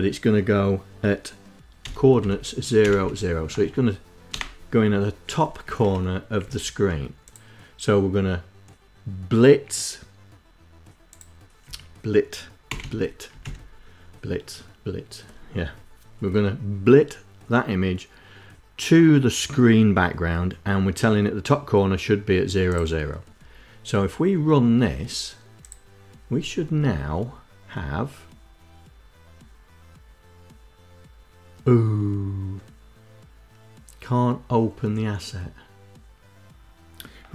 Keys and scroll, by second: 1.5-3.9 typing, 5.2 Down, 5.4 Up, 6.0 Down, 11.2 Right, 12.3 Delete, 12.4 t, 12.9 Down, 13.0 Up.